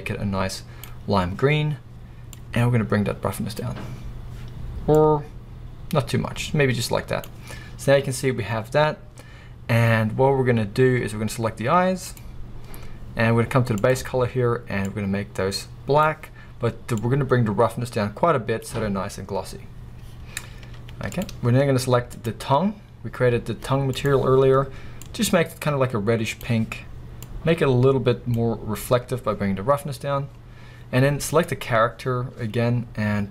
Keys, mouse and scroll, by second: 2.4-12.2 drag, 11.1-11.9 scroll up 2, 11.9-12.2 scroll up 1, 16.7 click, 21.3 z, 21.5-22.1 scroll up 2, 22.1 scroll up 1, 22.2-23.0 drag, 27.3-31.4 drag.